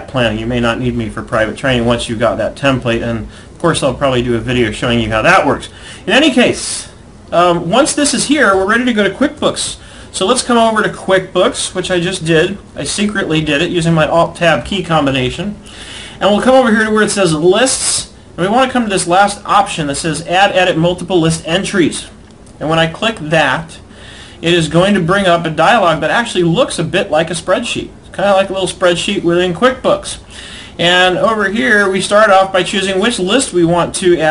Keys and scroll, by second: 8.3 alt+Tab.